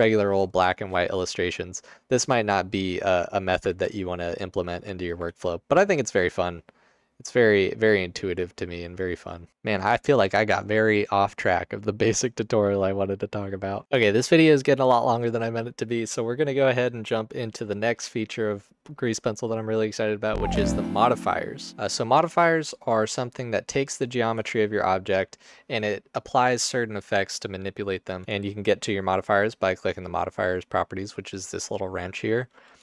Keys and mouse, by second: 5.8 ctrl+alt+click, 6.6 ctrl+alt+click, 7.0 alt+shift+click, 24.5 Tab, 28.2 drag, 32.7-32.8 drag.